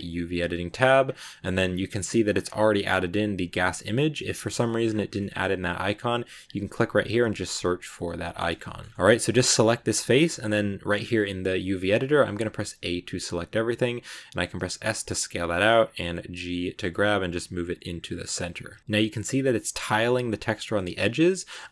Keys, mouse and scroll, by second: 4.3 shift+middle click, 4.7-5.0 shift+scroll up 2, 5.0 shift+middle click, 5.3-6.5 scroll up 1, 6.5 click, 8.5 shift+middle click, 8.7 shift+scroll up 2, 8.9 middle click, 12.6 a, 18.8 shift+middle click, 19.1-19.5 scroll up 1, 19.5-20.7 scroll down 2, 20.7 s.